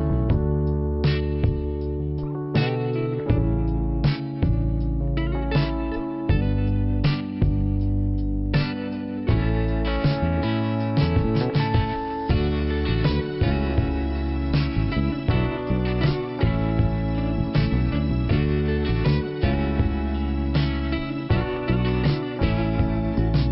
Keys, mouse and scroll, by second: 1.6 click, 3.2 click, 5.0 click, 6.2 click, 10.6 click, 11.5 click, 13.1 click, 16.9 click, 17.9 click, 19.1 click, 20.2-21.0 scroll down 1, 21.1 scroll up 1, 22.3 click.